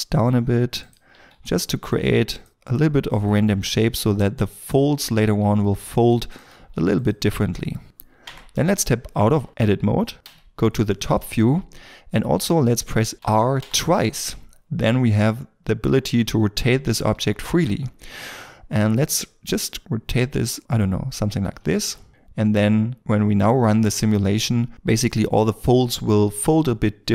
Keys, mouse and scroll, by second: 1.1 g, 2.5 g, 3.6 g, 5.4 g, 6.3 g, 8.2 Tab, 10.2 KP_7, 10.8 scroll down 1, 13.6 r, 21.8 g, 22.1 middle click.